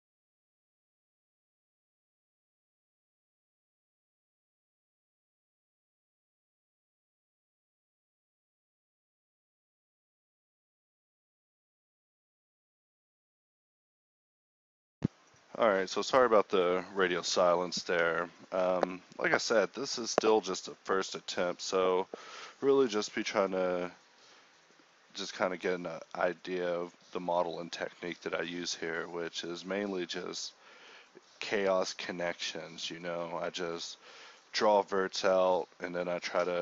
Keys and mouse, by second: 0.1-4.0 typing, 0.4 ctrl+z, 3.4 Tab, 4.6 Tab, 6.5-8.7 typing, 9.8 g, 10.3 g, 12.2-13.6 middle drag, 13.6-16.2 typing, 17.4 a, 17.5 ctrl+r, 18.8 ctrl+r, 19.1 x, 19.8 ctrl+r, 20.4 ctrl+z, 20.7 ctrl+r, 22.1 click, 22.6 x, 24.0 g, 25.3 f, 25.5 f, 25.5 d, 26.0 f, 26.3 ctrl+r, 27.1 f, 27.3 f, 28.9 e, 29.8 alt+s, 30.9 x, 31.6 x, 33.3 f, 33.4 ctrl+r, 34.3 f, 34.6 f, 34.8 ctrl+z, 35.1 f, 35.4 Tab.